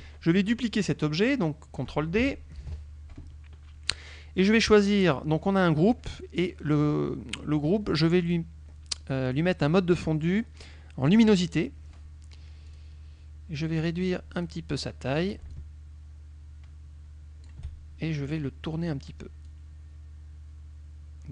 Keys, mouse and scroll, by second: 2.7 ctrl+d, 8.3 click, 11.1 click, 12.8 click, 14.5 click, 15.7-17.7 ctrl+shift+drag, 18.3 click, 19.6-21.3 drag.